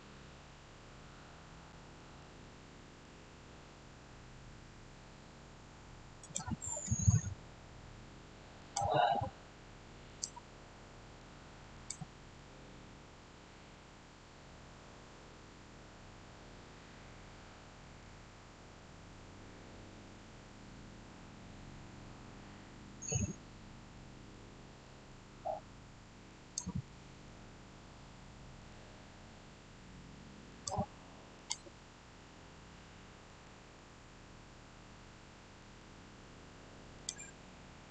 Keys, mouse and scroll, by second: 1.6-5.3 middle drag, 6.1 click, 7.8-8.5 scroll down 1, 8.5 click, 12.2-20.5 shift+middle drag, 23.8-26.2 middle drag, 26.2 shift+right click, 27.1-30.4 shift+middle drag, 30.4 click, 32.1-33.6 middle drag, 33.6 shift+scroll down 1, 36.9 click, 37.4 scroll up 1.